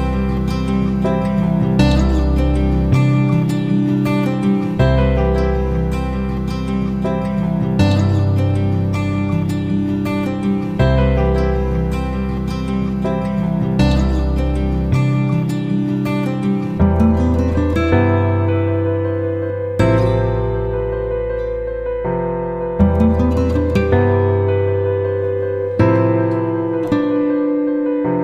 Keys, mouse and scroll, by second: 3.0 click, 8.6 shift+click, 14.4 ctrl+g, 17.5-21.4 shift+drag, 23.3 click, 25.2 ctrl+click, 27.3 shift+F9.